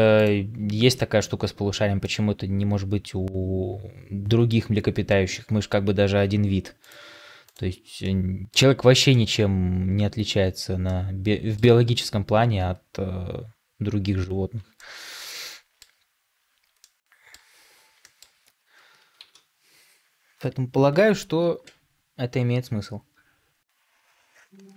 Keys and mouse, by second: 0.8 middle click, 1.9-4.4 middle drag, 7.9-8.5 middle drag, 9.0 shift+middle drag, 10.7-11.5 middle drag, 14.6-15.7 middle drag, 16.7-17.4 middle drag, 17.9 shift+middle drag, 19.1 ctrl+s.